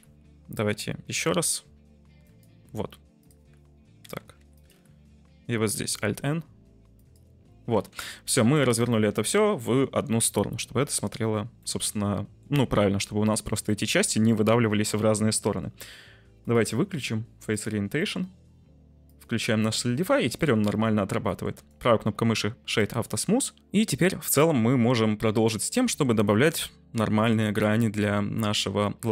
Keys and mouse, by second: 1.4 alt+n, 4.3 3, 4.5 middle click, 5.7 alt+n, 7.7 Tab, 11.6-12.3 middle drag, 15.3 middle click, 16.4-17.8 drag, 18.0 middle click, 19.0 click, 19.6-20.0 middle drag, 20.4-20.9 middle drag, 21.2 middle click, 21.6 click, 23.8-25.2 middle drag, 25.5-25.9 shift+middle drag, 26.4-27.1 middle drag, 28.0-28.3 middle drag.